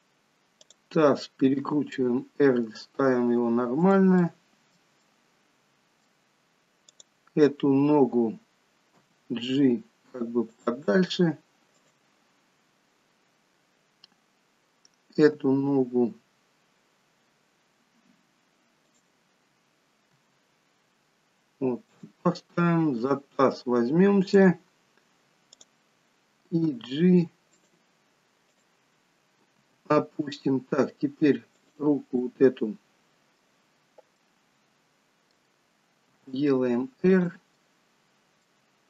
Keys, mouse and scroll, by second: 0.6 click, 1.5 r, 4.5 middle click, 5.0 middle click, 6.9 click, 7.7-8.1 scroll down 2, 9.0 g, 11.8 click, 15.2 g, 20.2 r, 23.0 click, 23.5 scroll up 3, 24.4 click, 25.5 click, 26.7 g, 28.4 click, 29.5 g, 32.2 middle click, 33.9 scroll down 1, 34.2 middle click, 36.2 r, 37.6 middle click.